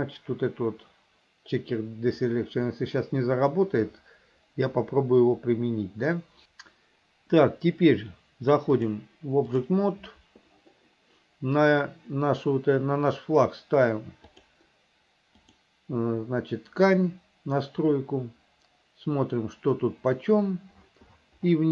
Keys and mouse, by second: 8.9 click, 14.5 click, 15.6 click.